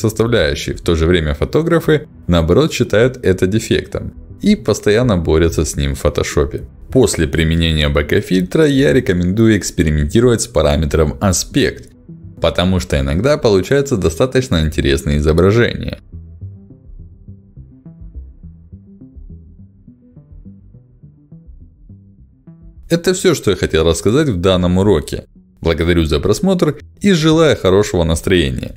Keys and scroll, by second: 7.1 1, 7.2 0, 7.4 Return, 11.6 2, 12.4 BackSpace, 12.8 3, 13.2 Return, 16.7 5, 16.9 0, 17.2 Return, 19.8 1, 20.1 0, 20.5 Return, 22.6 2, 22.7 Return.